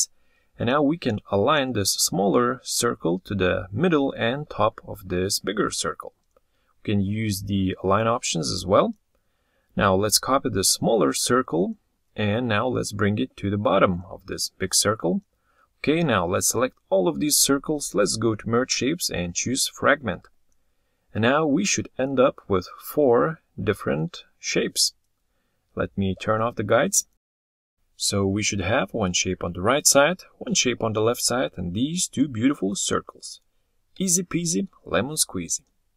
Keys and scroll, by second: 34.0 ctrl+z.